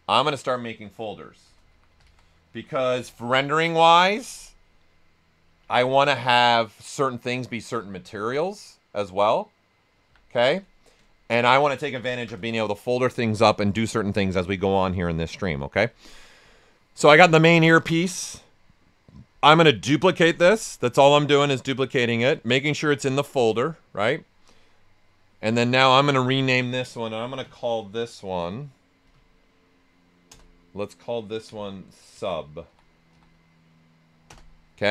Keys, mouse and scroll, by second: 1.2-3.5 typing, 5.2-6.2 typing, 10.0 s, 10.6 Return, 13.5-17.9 drag, 17.9-26.1 drag, 28.2 click, 29.0 Right, 31.4-33.6 typing, 34.2 Return.